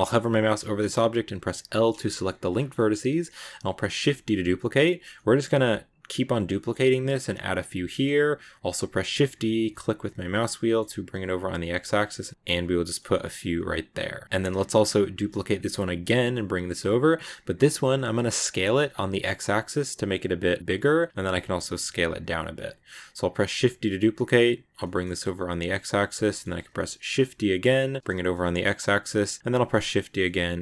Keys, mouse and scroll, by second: 1.4 scroll down 1, 1.6 middle click, 2.1 scroll down 2, 2.4 shift+middle click, 2.6-3.8 scroll up 2, 2.6 middle click, 3.8 shift+d, 6.1 shift+d, 7.7-9.0 shift+middle drag, 9.0 shift+d, 12.3 g, 13.8 a, 15.0 shift+d, 17.9 s, 22.5-22.9 scroll down 1, 22.9-23.3 scroll up 1, 23.3 shift+d, 26.1-27.1 shift+middle drag, 27.1 shift+d, 29.5 shift+d.